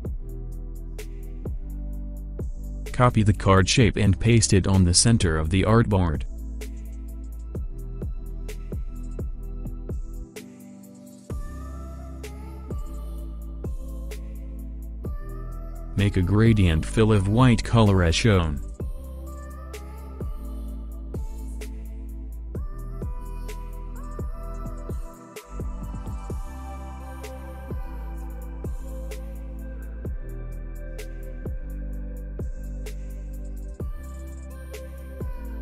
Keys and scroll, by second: 27.1 5, 27.9 0, 31.7 2, 32.5 Return, 32.5 0.